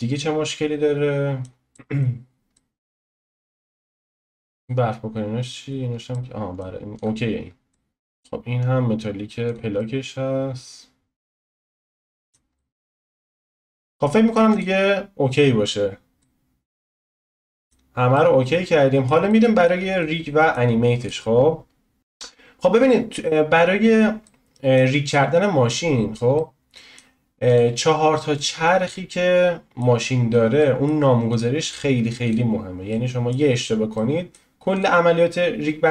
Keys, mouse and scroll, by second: 2.3 scroll down 1, 2.5 middle click, 3.2-3.8 scroll up 1, 3.8 shift+middle click, 4.5-5.8 drag, 5.8 scroll down 1, 6.1 middle click, 6.9-7.7 drag, 7.7 middle click, 7.9-9.7 drag, 9.8-13.4 middle drag, 13.6-14.5 middle drag, 14.5 click, 16.2-21.0 middle drag, 21.0-22.0 drag, 24.2-27.4 middle drag, 27.4 click, 28.8-30.2 middle drag, 30.2-30.6 scroll down 1, 30.6-31.3 middle drag, 31.3 click, 32.2 click, 32.9 middle click, 33.6-33.9 scroll down 1, 33.9 middle click, 34.7 click.